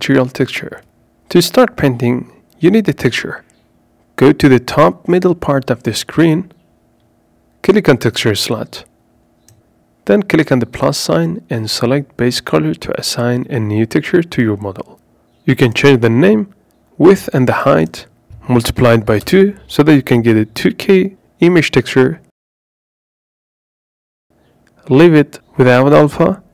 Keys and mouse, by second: 5.6-26.5 drag.